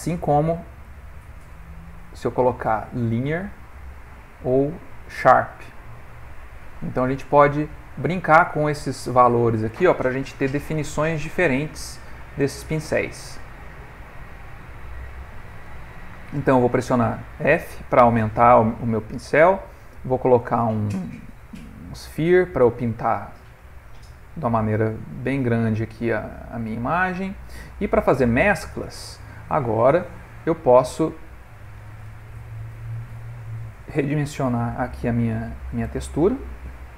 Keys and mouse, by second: 0.8 click, 3.5 click, 5.1 click, 7.3 click, 8.7 right click, 13.8 right click, 15.7 f, 18.8 click, 22.3 click, 25.0 right click, 25.7 click, 27.9 right click, 29.9 middle click, 31.8 middle click, 34.5 ctrl+right click, 35.3 shift+right click, 36.4 right click.